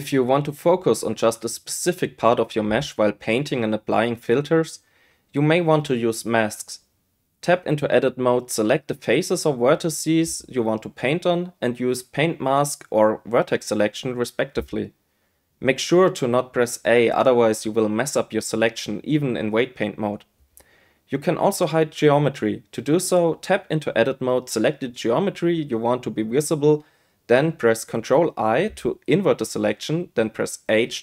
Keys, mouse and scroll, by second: 3.9 click, 7.7 Tab, 8.6-11.0 drag, 12.2 Tab, 13.7 click, 15.1-16.2 drag, 16.7 click, 17.0 click, 18.4 a, 24.5 Tab, 26.5-31.0 drag, 30.3 ctrl+i.